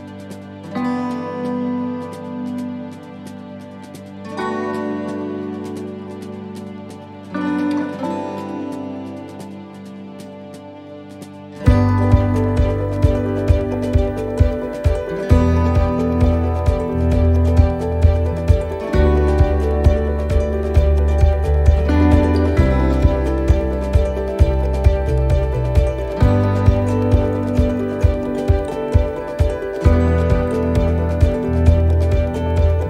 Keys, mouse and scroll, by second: 1.9 middle click, 4.9 shift+right click, 6.3 click, 7.7 middle click, 8.9 middle click, 10.1 right click, 11.0 click, 13.1 ctrl+z, 14.2 click, 17.7 middle click, 18.6 right click, 19.8 click, 24.0 right click, 25.2 click, 29.7 middle click, 31.3 middle click.